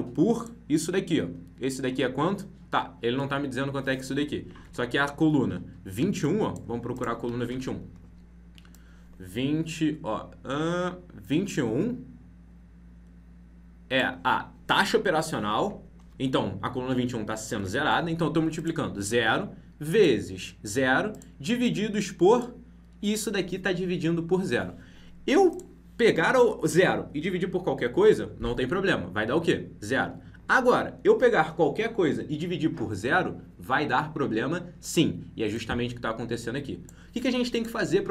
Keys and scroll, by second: 4.6 alt+Tab, 8.9 ctrl+Left, 17.5 alt+Tab.